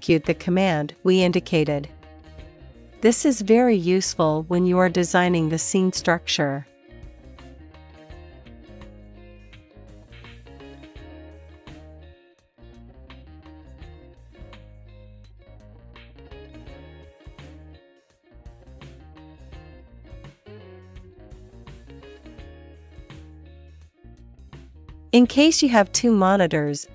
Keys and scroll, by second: 5.2-6.3 typing, 8.4 super+s, 16.2-19.3 typing, 22.2 super+s.